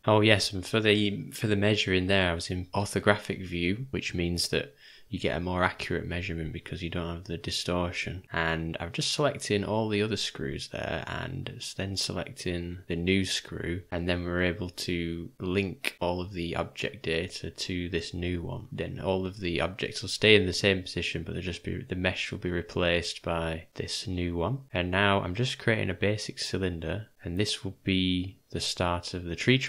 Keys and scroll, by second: 17.4 Delete, 21.8 f, 22.8 g, 27.1 g.